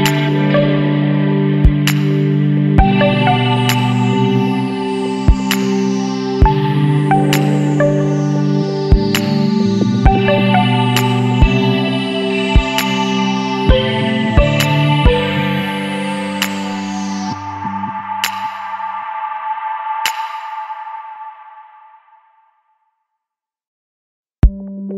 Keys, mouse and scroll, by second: 5.6 KP_Decimal, 6.3 scroll down 2, 6.4-9.0 middle drag, 9.0 click, 9.2 scroll down 1, 9.3-11.4 middle drag, 11.4 click, 12.3 middle click, 12.5-13.4 scroll up 1, 13.4 middle click, 14.3 shift+click, 14.7 middle click, 15.4 click, 16.3 click, 17.7 click, 18.4 click, 18.9 click, 21.5-22.1 scroll down 3, 22.1 Tab, 22.3-22.9 scroll down 10, 22.9-24.9 middle drag.